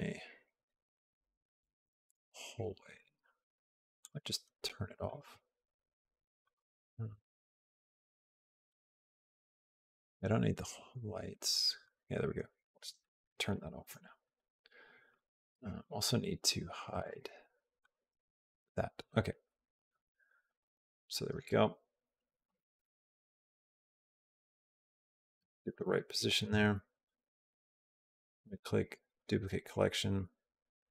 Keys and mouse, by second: 11.7 click, 12.8 shift+middle click, 13.3-14.9 middle drag, 16.8 click, 20.3 click, 22.3 g, 26.9 click, 27.9 right click.